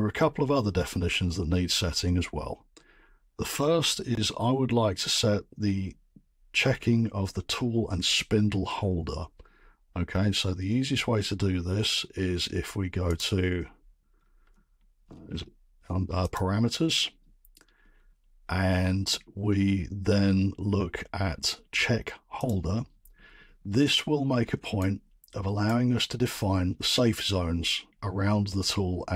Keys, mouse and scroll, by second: 13.1 click, 14.1-15.0 scroll, 15.0 scroll, 16.3 click, 17.8-18.3 scroll, 19.3-19.6 scroll, 22.4 click, 23.2-23.5 scroll, 24.4 scroll, 25.6 right click.